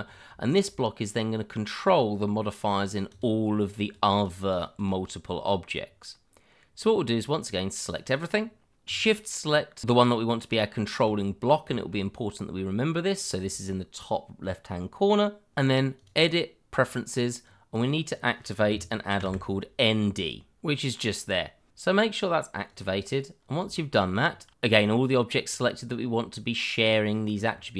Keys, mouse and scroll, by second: 0.0-0.4 scroll up 1, 0.4 shift+middle click, 1.0-1.8 scroll down 1, 1.9 click, 4.3 double click, 6.8 click, 8.8 click, 10.5 shift+middle click, 11.1-11.6 scroll up 1, 11.7 shift+middle click, 11.8 middle click, 15.8 click, 17.8-20.4 scroll down 1, 22.7 click, 23.4 scroll down 1, 23.7 shift+middle click, 24.2-24.6 scroll down 1, 24.6 shift+middle click, 25.1 click, 26.8-27.7 scroll up 1.